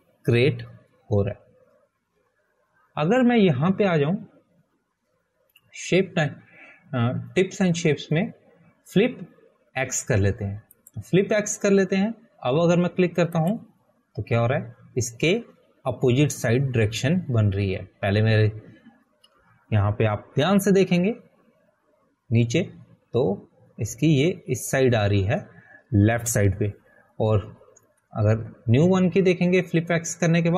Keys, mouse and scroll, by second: 1.3 click, 13.2 click, 16.6 click.